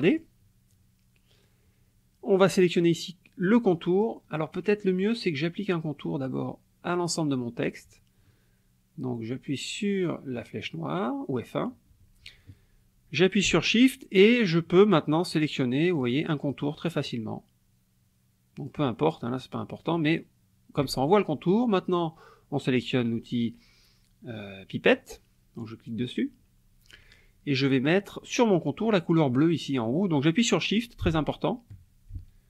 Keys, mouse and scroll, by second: 3.8 click, 10.4 click, 15.3 shift+click, 16.0 shift+click, 16.5 shift+click, 17.0 shift+click, 18.6 shift+click, 25.0 click.